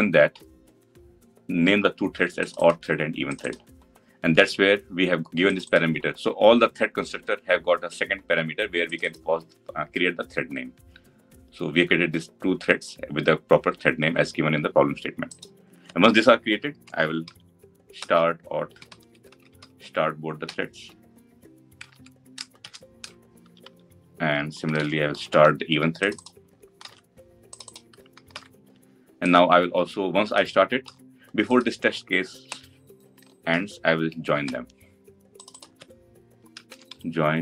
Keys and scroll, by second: 17.8 Return, 24.6 ctrl+d, 26.6 ctrl+c, 28.0 ctrl+v, 33.2 ctrl+c, 33.3 ctrl+v.